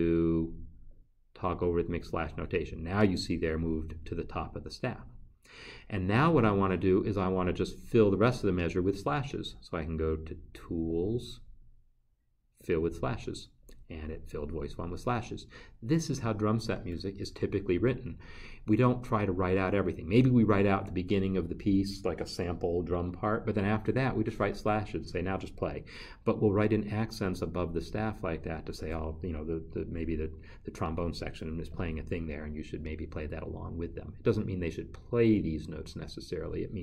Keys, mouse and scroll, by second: 13.4 click.